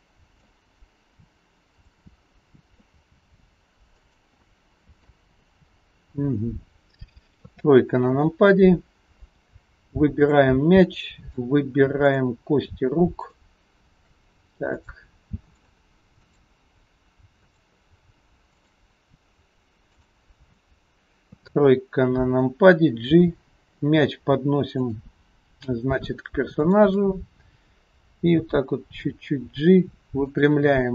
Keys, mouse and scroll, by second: 1.7 click, 2.4 middle click, 2.4-2.9 scroll up 1, 3.0 r, 4.5 middle click, 5.8-7.5 scroll down 10, 7.5 KP_3, 8.3-9.1 scroll down 1, 9.1-9.5 scroll up 5, 10.2 click, 10.7 scroll up 1, 10.9 middle click, 12.2 shift+click, 13.2 shift+click, 14.8 click, 15.6 click, 17.4 shift+click, 18.5 shift+click, 21.4 KP_3, 21.9-23.1 scroll down 3, 23.1 g, 26.6 shift+click, 28.4 g, 30.8-30.9 scroll down 4.